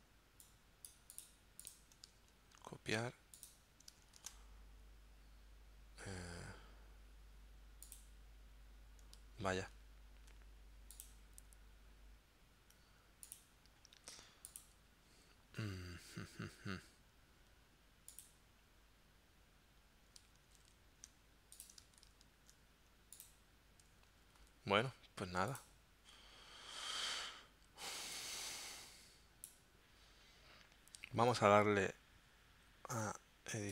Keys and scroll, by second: 2.6 super+c, 4.2 super+v, 9.7 super+z, 20.5 super+c, 22.0 super+v, 24.4 super+z.